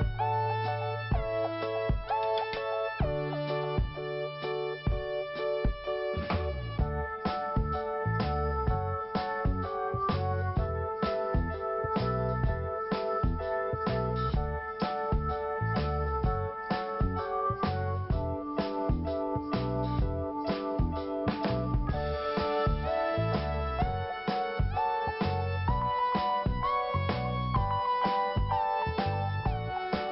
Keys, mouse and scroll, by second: 3.2-3.6 scroll up 1, 5.6 click, 9.2 scroll down 1, 10.4 click, 13.5 scroll down 1, 15.2 click, 17.3 scroll up 1, 18.7 scroll up 2, 19.4 click, 19.5 click, 20.4 click, 20.5 click, 21.1 click, 23.1 click, 24.9-25.3 scroll down 2, 26.6 scroll up 2, 27.3 click, 29.6 click.